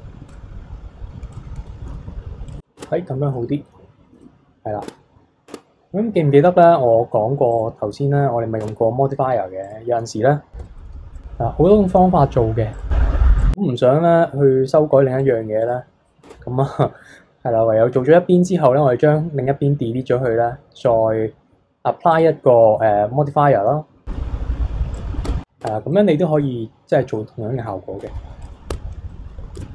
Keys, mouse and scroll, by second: 0.3-1.4 drag, 1.9 e, 2.8 Tab, 3.3 scroll down 1, 3.3-3.9 middle drag, 3.9 scroll down 2, 4.1 KP_3, 4.8 Tab, 5.5 Tab, 7.5-8.6 drag, 8.6 Tab, 9.6 click, 10.6 b, 10.9 x, 12.7-14.0 drag, 15.2 click, 15.6 click, 16.2 Tab, 17.4-18.7 scroll up 1, 22.1-24.7 drag, 24.9 click, 25.3 Tab, 25.6 Tab, 25.9-28.0 middle drag, 28.0 KP_3, 28.4 click, 28.7 Tab, 29.1 middle drag, 29.4 a, 29.6 Tab.